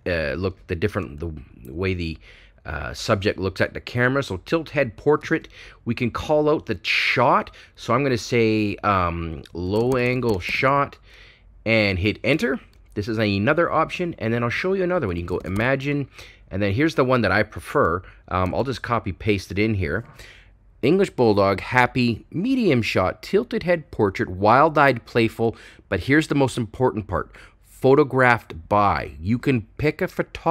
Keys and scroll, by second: 9.7-12.3 typing, 14.7-15.7 typing.